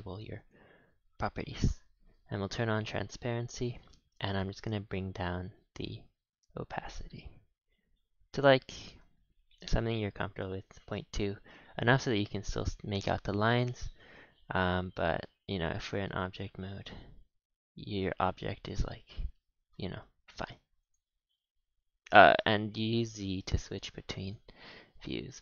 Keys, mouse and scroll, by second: 3.7-4.6 scroll up 1, 4.6-11.2 shift+drag, 11.2-11.7 scroll up 4, 11.7-12.2 shift+middle drag, 12.2-13.0 scroll up 5, 13.0-13.7 scroll down 13, 13.7 a, 13.8 a, 14.6 click, 14.9 z, 15.8 Tab, 16.0 s, 17.1 g, 19.2 ctrl+z, 20.0 Tab, 20.8 click, 21.4 z, 22.9-25.4 typing.